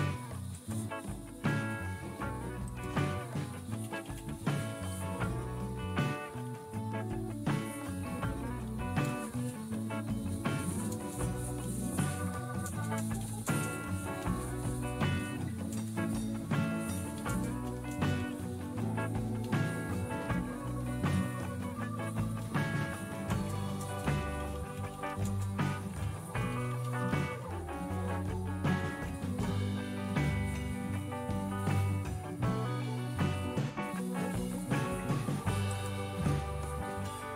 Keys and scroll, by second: 3.3-5.0 typing, 6.3-7.3 Left, 8.6 #, 9.0 space, 9.7-10.5 Right, 10.8 Right, 10.8-15.6 typing, 16.9-29.9 typing.